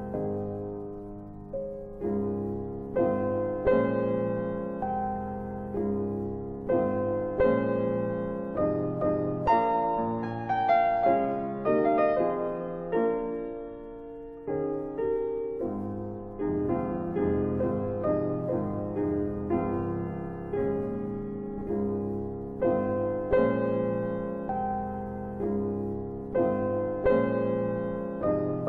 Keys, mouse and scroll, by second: 1.3 shift+click, 2.2 middle click, 5.4 middle click, 5.8 scroll down 1, 6.4-6.8 scroll up 1, 9.0-9.9 scroll up 1, 9.9 click, 11.2 ctrl+click, 11.5 ctrl+double click, 13.8 middle click, 15.2 ctrl+click, 17.2 ctrl+double click, 18.7 middle click, 20.1 ctrl+click, 20.4 ctrl+double click, 25.1 ctrl+click, 25.9 ctrl+click, 26.3 ctrl+click, 26.5 ctrl+click, 27.8 click, 28.4 right click.